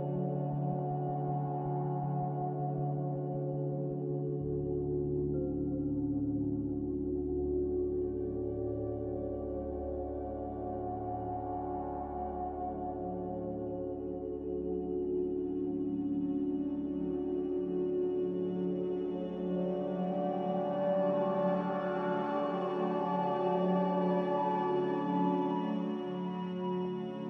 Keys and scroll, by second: 6.1 ctrl+z, 6.2 a.